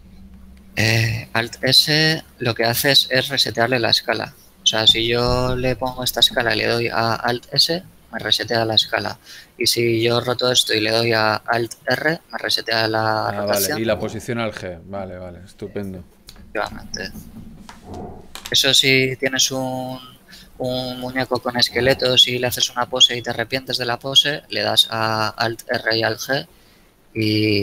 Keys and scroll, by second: 7.9 alt+s, 10.0 r, 11.9 alt+r, 14.0 g, 16.0 alt+g, 19.3 g, 26.0 alt+r, 26.4 alt+f, 27.3 alt+g.